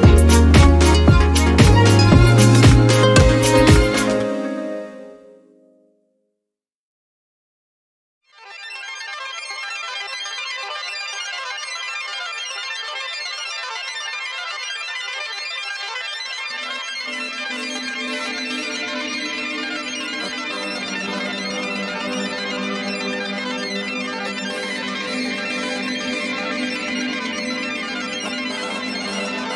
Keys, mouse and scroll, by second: 2.1-2.5 ctrl+scroll down 2, 3.2-4.2 scroll up 6, 4.5 space, 5.7 click, 6.6 click, 8.8 click, 11.6 click, 12.0-12.5 scroll up 1, 14.6 click, 18.8 click, 21.9-23.2 drag, 24.8-26.2 drag, 27.5 click, 29.2 click.